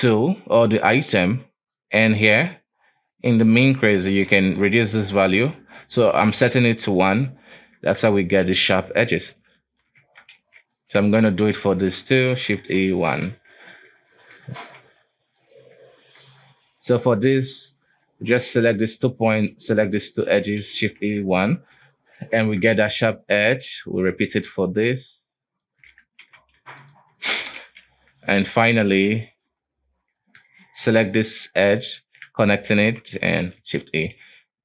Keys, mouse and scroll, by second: 3.6-7.8 drag, 7.8 scroll down 4, 7.9 Tab, 9.2-9.6 scroll up 2, 9.6 shift+middle click, 10.1 Tab, 10.5 alt+a, 10.8 right click, 11.5 right click, 12.1 shift+right click, 12.8 shift+e, 13.4 Tab, 13.8 Tab, 14.2 right click, 14.8 shift+e, 15.6 Tab, 16.1 Tab, 16.9 right click, 17.4-17.8 scroll up 3, 17.8-18.9 shift+middle drag, 18.9 shift+right click, 19.5 shift+right click, 19.9 shift+right click, 20.4 shift+e, 21.1 Tab, 21.4-22.1 scroll down 2, 22.1 shift+middle click, 22.3 scroll up 2, 22.6 Tab, 22.9 alt+a, 23.4 right click, 24.2 shift+right click, 25.1 shift+right click, 25.8 shift+right click, 26.3 shift+e, 27.1 Tab, 27.4-27.8 scroll down 2, 27.8 alt+a, 28.1 Tab, 28.9 right click, 29.6 shift+right click, 31.3-31.9 scroll up 2, 31.9 right click, 32.6 shift+right click, 32.9 shift+e, 33.7 Tab, 34.3 alt+a, 34.5-34.6 scroll down 2.